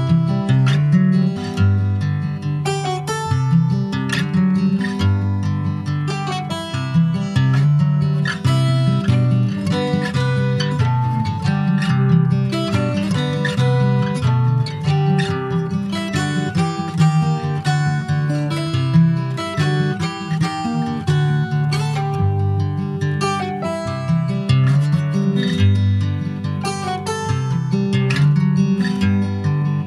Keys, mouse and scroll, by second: 0.1 scroll up 1, 0.2 Tab, 0.6 click, 1.3 middle click, 1.6 2, 1.8 click, 2.2 middle click, 2.6 ctrl+click, 2.8 ctrl+b, 4.2 middle click, 4.8 Tab, 4.9 click, 5.4 ctrl+a, 6.1 Tab, 6.5 click, 7.1 middle click, 7.5 ctrl+b, 10.7 click, 11.8-13.7 drag, 13.7 middle click, 14.0-14.4 scroll up 1, 14.4-15.6 middle drag, 15.6-17.2 drag, 17.2 Tab, 17.4 click, 17.7 middle click, 18.4 ctrl+s, 18.4 ctrl+click, 18.5-20.6 right drag, 20.6 click, 20.9 click, 22.5 click, 22.7-24.5 right drag, 24.5 click, 24.8 scroll down 1, 25.0 middle click, 25.4 ctrl+s, 25.5 click, 25.8 alt+middle click, 26.3 alt+middle click, 27.0 Tab, 27.3 middle click, 27.8 click, 28.9 3, 29.2 click, 29.7 alt+middle click.